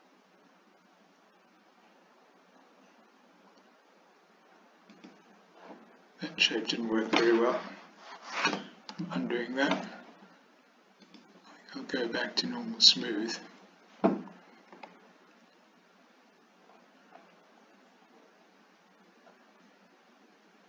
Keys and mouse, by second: 9.0 ctrl+z, 11.1-13.4 drag, 14.8 s.